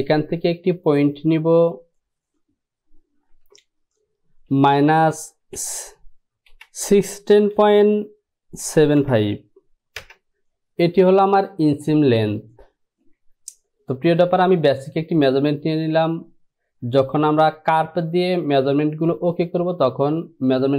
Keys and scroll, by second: 3.4 Down, 4.5 KP_Subtract, 5.5 KP_1, 7.6 KP_Decimal, 8.7 KP_7, 9.1 KP_5, 10.1 Return.